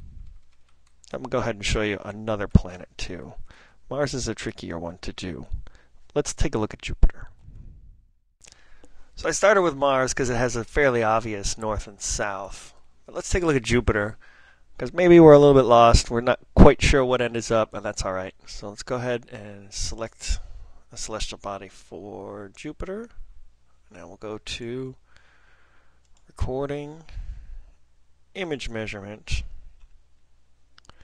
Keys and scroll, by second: 0.1 ctrl+n, 0.2 ctrl+n, 0.7 ctrl+p, 0.9 ctrl+p, 1.0 ctrl+p, 1.2 ctrl+p, 2.1 ctrl+p, 2.2 ctrl+n, 3.0 ctrl+n, 3.0 ctrl+n, 3.9 Down, 4.2 Down, 4.9 Down, 5.1 Down, 5.6 Right.